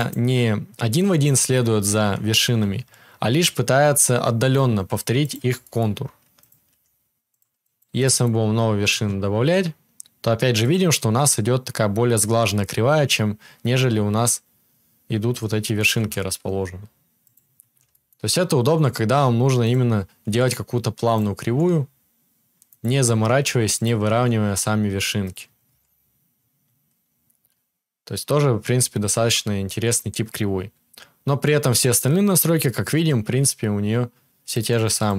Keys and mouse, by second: 1.8-35.1 right drag, 2.5 g, 6.3 click, 6.3 middle click, 6.6 g, 7.6-10.6 shift+drag, 7.6-10.6 shift+middle drag, 9.3 e, 15.9 e, 18.6 e, 20.1 e, 21.3 e, 22.8 e, 24.0 e, 25.6 Tab, 29.0 Tab, 34.4-35.1 drag, 34.4-35.1 middle drag.